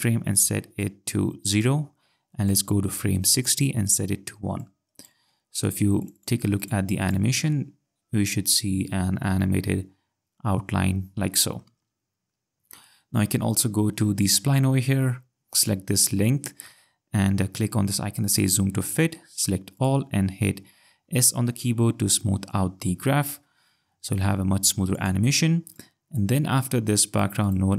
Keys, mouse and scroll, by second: 4.6 click, 6.0 click, 7.5 space, 11.7 space, 14.2 click, 15.6 click, 18.3 click, 21.8 s, 24.9 click, 27.5 click.